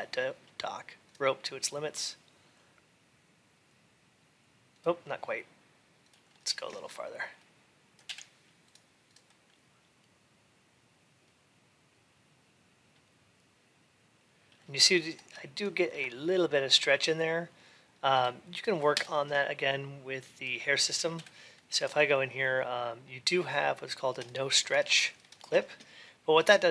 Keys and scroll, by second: 21.0 ctrl+a.